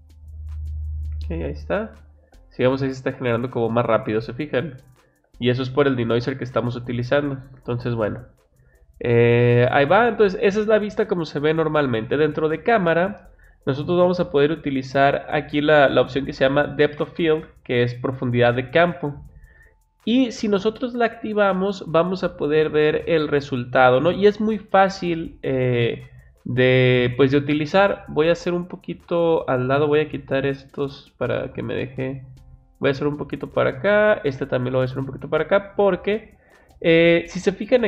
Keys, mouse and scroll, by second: 17.3 click, 20.3 click, 27.8-29.4 drag, 30.5 click, 31.8 click, 34.0 click.